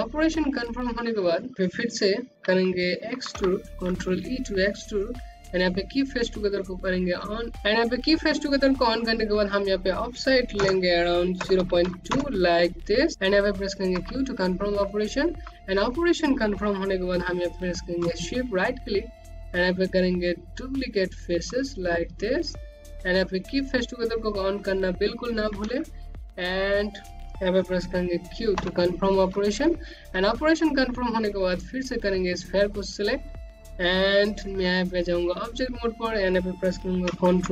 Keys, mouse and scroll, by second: 0.1 middle click, 2.0 ctrl+e, 4.7 click, 7.9 click, 8.9 BackSpace, 9.7 KP_0, 9.9 KP_Decimal, 10.2 KP_2, 10.4 KP_Enter, 13.0 click, 13.7 q, 14.3 scroll down 1, 14.7 alt+click, 16.7 right click, 22.4 click, 26.9 q, 27.9 click, 28.4 scroll down 1, 29.3 click, 29.9-32.2 scroll up 1, 32.9 right click, 36.0 ctrl+1.